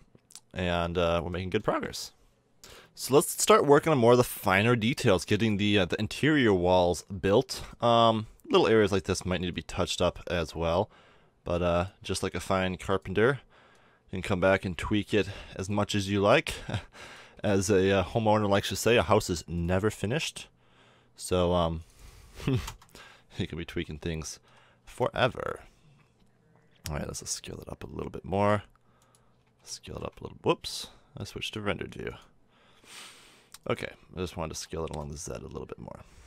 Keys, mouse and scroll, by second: 0.9-2.6 middle drag, 4.1-6.3 middle drag, 6.5-8.3 middle drag, 8.3 Tab, 12.0 Tab, 12.5 Tab, 17.3 a, 17.5 Tab, 18.6-21.3 drag, 20.0 Tab, 23.6 Tab, 24.4 s, 29.5 a, 29.8 shift+z, 34.5 s.